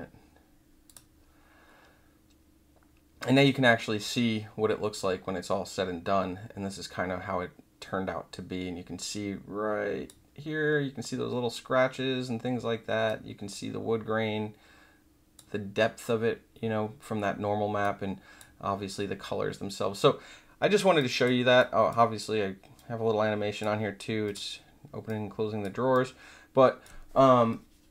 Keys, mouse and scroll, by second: 0.8 click, 4.9 click, 8.5-10.0 drag, 13.0-15.3 drag, 17.8 click, 20.9 click, 21.5 click, 22.7 click, 24.2 click, 25.0 click, 25.9 click.